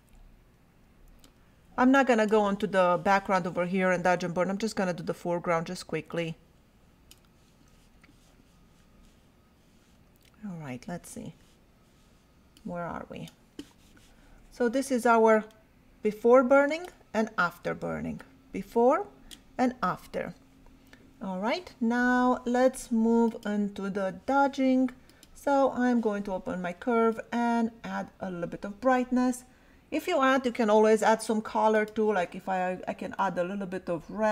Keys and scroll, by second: 0.7 ].